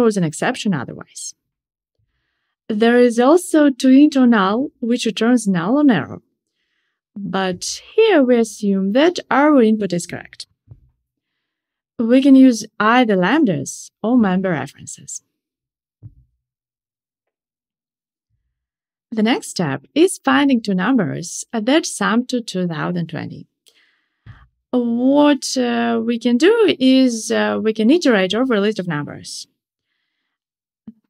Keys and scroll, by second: 5.3 Escape, 10.3 alt+Return, 22.5 Tab.